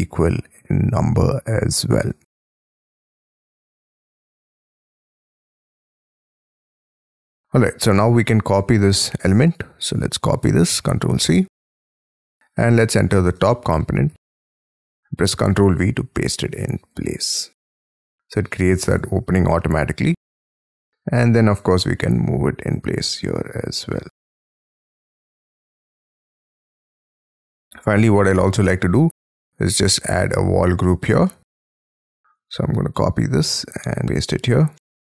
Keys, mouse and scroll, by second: 0.6 scroll down 5, 1.7 middle click, 2.5-3.2 scroll up 19, 3.3 t, 4.8 Escape, 6.0 space, 6.1-6.9 scroll down 15, 7.6 middle click, 9.5 double click, 9.9 double click, 10.7 ctrl+c, 11.2 Escape, 11.6-12.0 scroll down 5, 12.5 double click, 12.9 double click, 13.4 shift+middle click, 14.1 j, 15.3 ctrl+v, 17.8 middle click, 18.9 j, 19.5 middle click, 20.0-20.6 scroll up 7, 24.5 shift+click, 25.2 scroll down 5, 25.5 space, 26.7 middle click, 27.0 Escape, 27.1 scroll down 1, 27.8 scroll down 5, 28.2 shift+middle click, 29.5 double click, 29.8 double click, 30.3-31.2 scroll up 15, 31.2 middle click, 31.6 m, 31.9-32.3 scroll up 8, 33.1-33.6 scroll down 10.